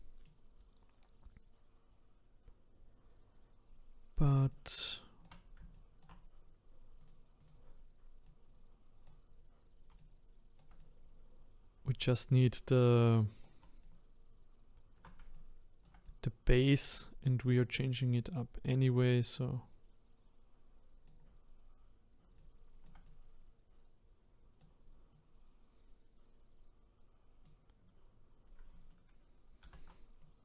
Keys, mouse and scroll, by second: 2.1-3.0 scroll up 1, 5.2-7.1 shift+right drag, 7.1-8.2 drag, 8.2-25.1 right drag, 25.1-29.6 drag, 29.6 ctrl+z, 30.2-30.4 drag.